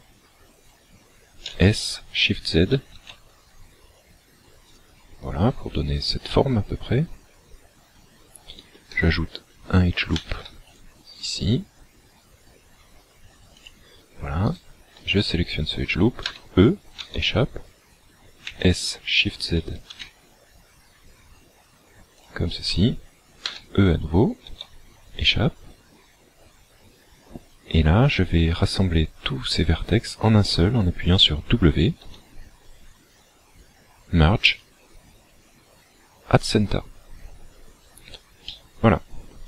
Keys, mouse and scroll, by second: 1.5 s, 4.7 shift+click, 7.5-8.2 scroll up 2, 10.1 ctrl+r, 13.6 click, 14.5 alt+right click, 16.2 e, 18.5 s, 22.2 shift+click, 23.6 e, 32.0 w, 37.6 scroll down 3, 38.4 middle click.